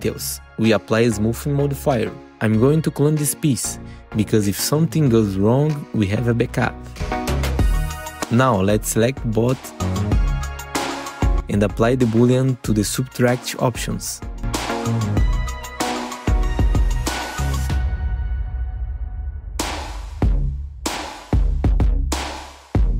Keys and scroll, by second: 0.4 F4, 10.1 alt+q, 10.6 F4, 17.2 F4, 18.0 F4, 19.1 ctrl+t, 19.8 4, 20.5 3, 20.8 F4.